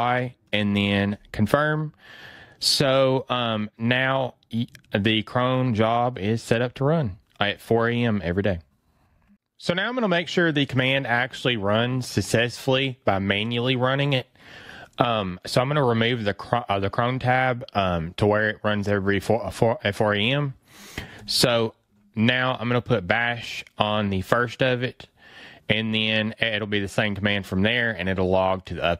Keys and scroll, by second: 22.1 fn+Right, 22.7 fn+Left, 26.1 fn+Right.